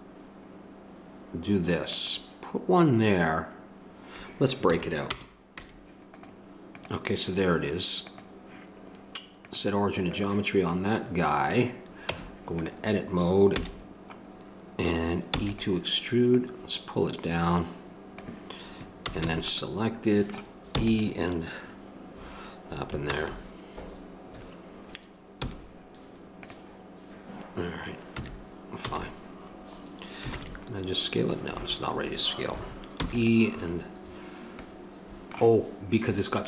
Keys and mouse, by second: 5.6 Tab, 6.7-9.1 right drag, 9.1-11.0 drag, 11.0-12.6 middle drag, 12.1 Tab, 13.5 a, 15.3 e, 16.3 click, 17.9 click, 19.0 a, 19.2 a, 20.7 e, 23.0 ctrl+z, 25.4 w, 28.2 a, 28.9 a, 30.3 alt+s, 32.9 e.